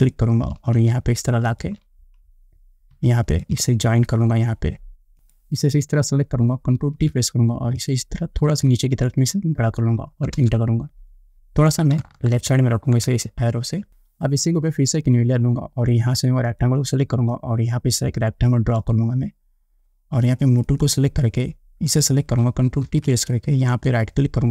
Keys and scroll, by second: 7.0 ctrl+t, 10.6 Return, 23.1 ctrl+t.